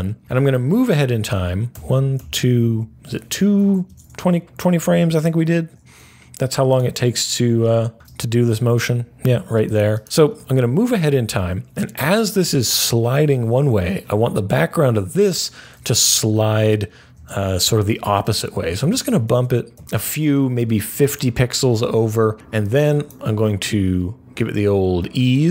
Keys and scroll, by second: 1.6 Page_Down, 2.1 Page_Down, 7.9 u, 18.7 Right, 19.2 Right, 19.7 Right, 24.3 F9.